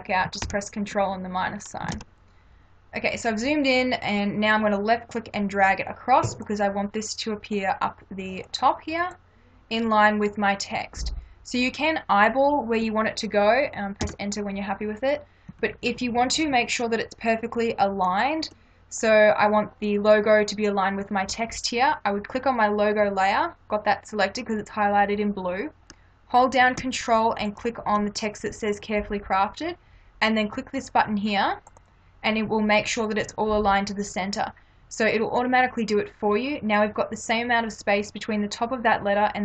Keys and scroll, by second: 0.4 ctrl+-, 1.9 ctrl+=, 14.0 Return, 15.5 Right.